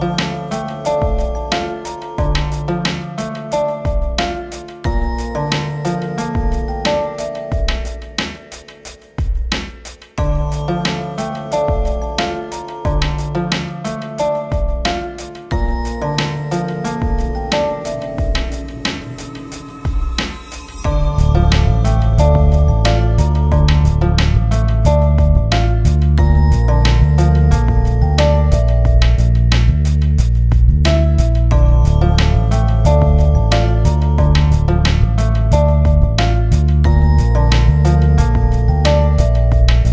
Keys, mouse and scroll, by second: 2.4 right click, 2.9 shift+F2, 3.8-4.5 scroll down 1, 4.5 click, 4.9 scroll down 1, 5.4-5.8 scroll up 1, 8.4-11.0 drag, 13.3-14.2 scroll down 1, 20.4-20.8 scroll down 1, 21.1-23.1 drag, 23.1 ctrl+g, 23.5 shift+click, 23.9 c, 24.1-26.8 shift+drag, 26.8-28.6 drag, 28.8 shift+c, 29.0 shift+click, 31.0 c, 32.0 shift+click, 32.3 shift+F2, 33.0 scroll down 1, 33.5 click, 34.0 scroll up 1, 35.0 click, 36.6 scroll up 1, 37.3 shift+Page_Up, 39.7 click.